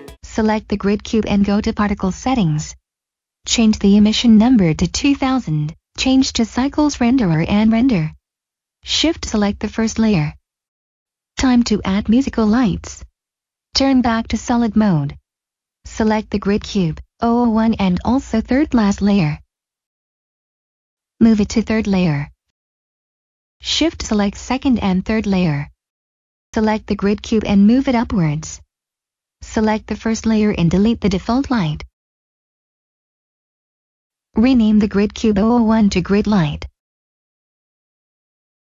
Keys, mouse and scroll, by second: 0.8 middle click, 3.7 click, 4.1 typing, 5.0 Return, 5.9 click, 8.9 click, 10.7 click, 12.7 click, 14.9 scroll down 1, 15.2 click, 16.2 middle click, 18.0 click, 18.7 middle click, 22.7 click, 25.7 click, 26.1 click, 28.4 click, 28.8 middle click, 29.0 click, 29.5-30.6 scroll down 1, 30.6 click, 31.9 Delete, 32.3 click, 36.4-37.4 typing, 37.8 Return, 38.1 click.